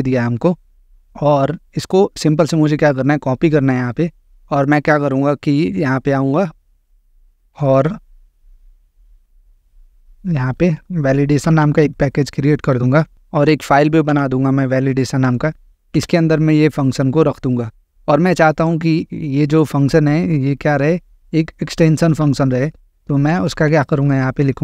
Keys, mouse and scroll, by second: 3.1 click, 4.6-5.6 drag, 6.4-8.0 drag, 9.4-10.4 drag, 11.2-12.7 typing, 13.1-13.6 scroll, 14.1 Return, 15.2 click, 15.8 ctrl+v, 18.6-19.6 drag.